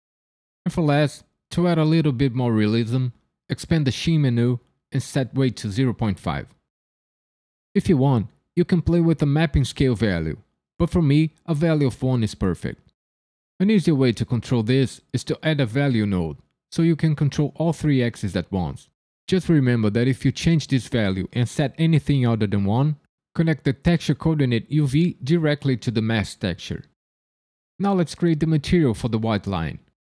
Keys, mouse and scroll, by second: 3.4 click, 4.8 click, 12.2 shift+a, 17.0 click, 20.2 click, 24.9 click.